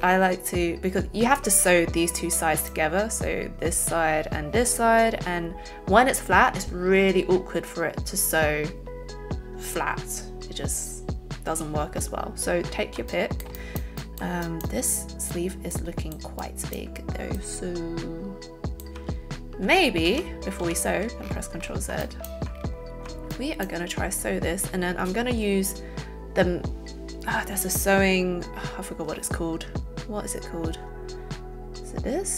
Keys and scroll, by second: 20.0 ctrl+z, 20.6 ctrl+z.